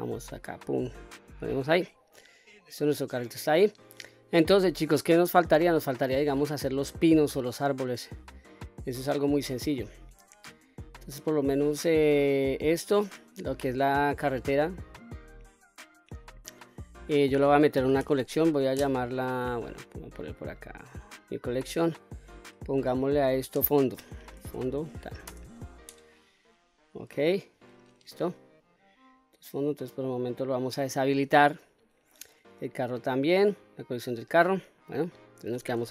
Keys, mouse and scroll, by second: 1.8-2.1 scroll down 1, 2.1-2.6 middle drag, 2.8-3.2 scroll down 1, 3.2-3.6 middle drag, 4.0 scroll down 2, 4.5-4.8 middle drag, 5.2 scroll up 1, 5.6-6.3 middle drag, 6.3-7.7 scroll down 2, 7.7-8.1 scroll down 1, 8.1-8.6 middle drag, 8.9-9.4 scroll up 2, 9.5 scroll down 1, 12.5 click, 18.0 m, 31.0 click, 33.7 click, 35.1-35.9 scroll up 3.